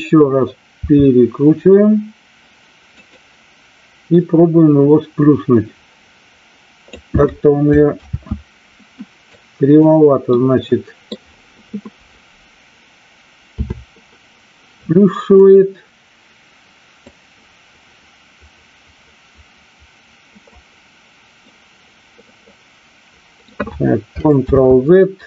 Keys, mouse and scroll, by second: 0.8 r, 3.0 click, 4.1-6.8 drag, 8.0 ctrl+z, 9.2-9.8 drag, 10.3-11.1 middle drag, 13.4 KP_7, 15.3 click, 17.1-20.4 drag, 21.4-23.4 middle drag, 24.3 ctrl+z.